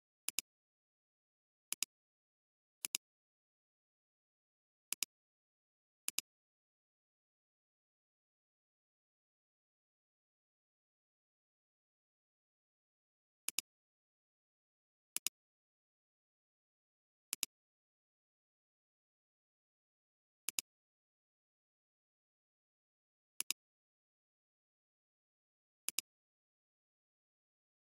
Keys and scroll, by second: 2.9 space, 4.4 ctrl+z, 4.8 ctrl+space, 13.4 alt+space, 14.2 alt+space.